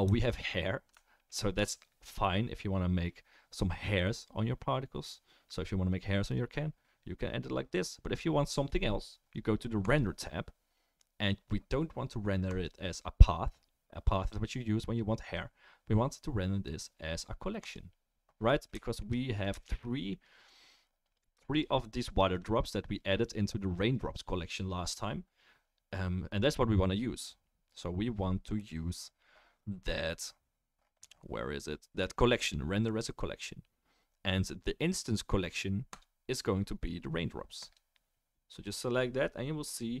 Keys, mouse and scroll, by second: 1.3 alt+right drag, 1.4 alt+middle drag, 1.5-2.1 alt+right drag, 2.1-3.2 middle drag, 3.2-9.9 right drag, 9.9-19.4 middle drag, 19.4 shift+right click, 19.6-20.7 shift+middle drag, 20.7 right click, 21.1 drag, 21.5 shift+click, 22.1 shift+click, 27.7 click, 35.9-38.8 drag, 35.9-38.8 right drag, 38.8-40.0 middle drag.